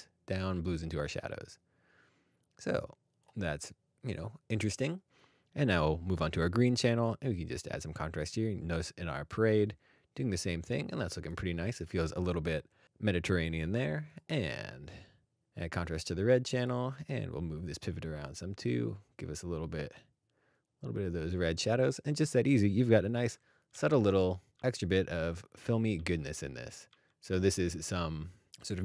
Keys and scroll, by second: 10.7-11.3 scroll down 1, 15.4 scroll up 1, 23.1 alt+d, 23.7 alt+d, 24.5 alt+d, 24.6 alt+d, 25.2 alt+d, 25.9 alt+d, 26.9 alt+d, 27.3 alt+d.